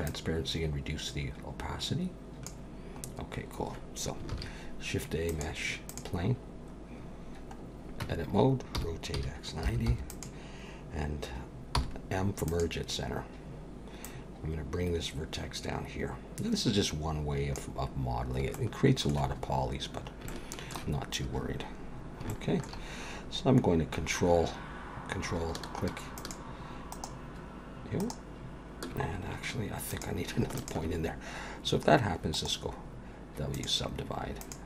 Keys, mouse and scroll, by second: 0.0 click, 3.1-3.7 scroll up 1, 4.3 shift+a, 6.5-7.4 scroll down 2, 7.6-8.0 scroll up 2, 8.0 Tab, 8.8 r, 11.7 m, 14.0 click, 18.6 shift+middle click, 19.3-20.2 scroll up 4, 20.3 shift+middle click, 21.0-21.6 scroll up 1, 21.6 scroll up 1, 21.8 scroll down 2, 22.3 shift+middle click, 26.2 ctrl+click, 26.9 ctrl+right click, 28.0 ctrl+right click, 29.9 click, 30.6 shift+click, 32.3 right click, 34.4 click.